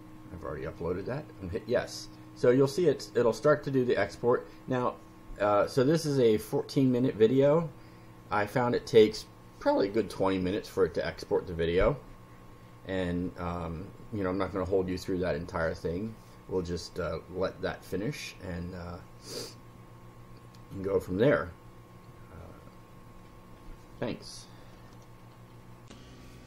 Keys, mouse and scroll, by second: 25.8 ctrl+r.